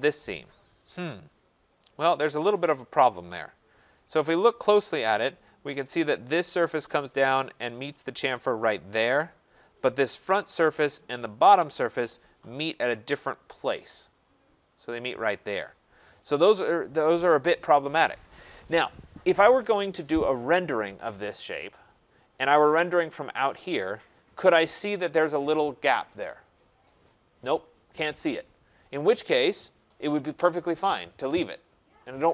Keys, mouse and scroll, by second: 2.5 right click, 3.2-3.8 scroll, 3.8 scroll, 6.3 click, 6.3-7.4 scroll, 7.4 click, 10.3 click, 11.5 click, 22.0-23.0 scroll up 12, 23.0 scroll down 1, 23.1 middle click, 23.7 click, 23.7 scroll.